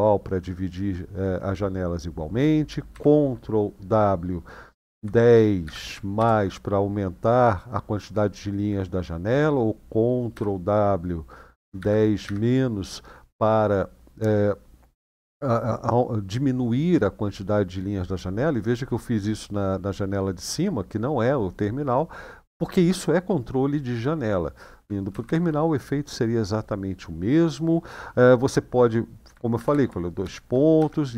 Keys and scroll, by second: 2.7 ctrl+w, 4.7 1, 5.4 0, 10.1 ctrl+w, 11.3 1, 11.5 0, 12.0 -, 14.7 typing, 24.9 ctrl+w, 25.0 ctrl+w, 29.4 ctrl+w, 30.0 :, 30.5 Up, 31.0 Down.